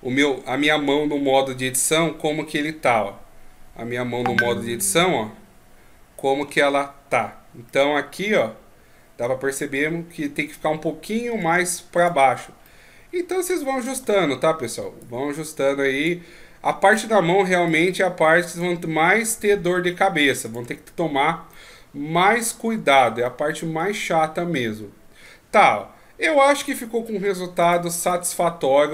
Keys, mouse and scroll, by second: 4.9 KP_3, 6.4 KP_1, 7.7 middle click, 8.5 KP_3, 11.3 Tab, 12.0 right click, 12.6 middle click, 14.0 Tab, 15.0 click, 16.8 right click, 17.7 click, 19.3 right click, 19.8 Tab, 20.5 right click, 20.6 Tab, 21.5 middle click, 22.6 Tab, 23.2 middle click, 24.0 scroll down 4, 24.6 middle click, 26.5 click, 28.1 middle click.